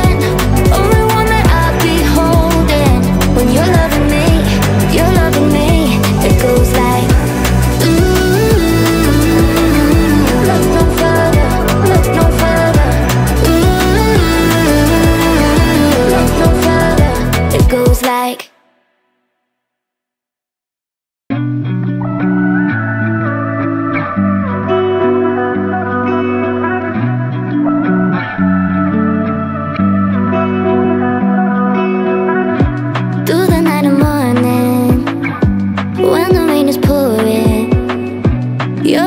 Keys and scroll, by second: 1.3-8.4 typing, 20.2-23.0 typing, 24.3-26.4 typing, 33.8-38.2 typing.